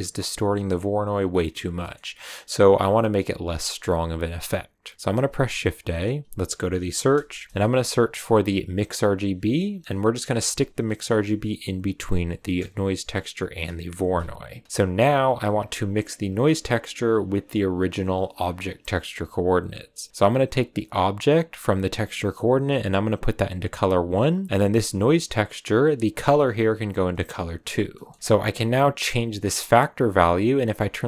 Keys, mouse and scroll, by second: 1.6 scroll down 1, 1.7 middle click, 2.2 click, 5.1 shift+a, 13.2 click, 14.8 click, 16.2 click, 17.7 click, 20.8 click, 24.5 click, 25.7 click, 27.4 click, 27.9 middle click, 28.1-28.5 scroll up 2, 28.5-31.0 drag.